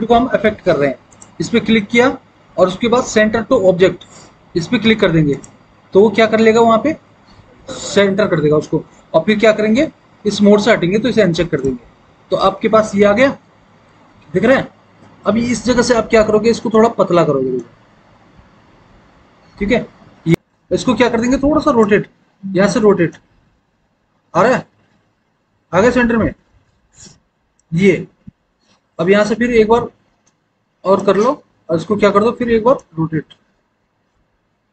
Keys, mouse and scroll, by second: 22.1 e, 29.2 r, 32.0 e.